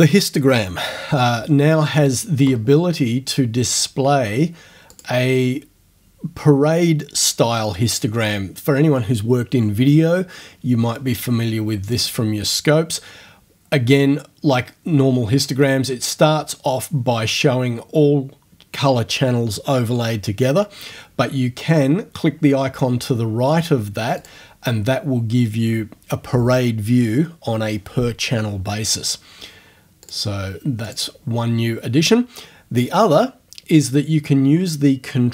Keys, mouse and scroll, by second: 5.0 click, 24.2 click, 30.0 click, 30.9 click.